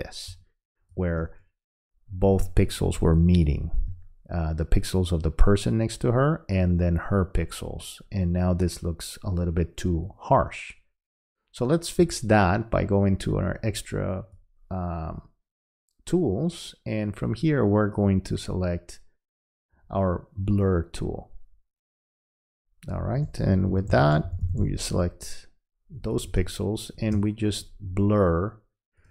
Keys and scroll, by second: 0.3 space, 2.4 space, 23.7 [, 26.4 space.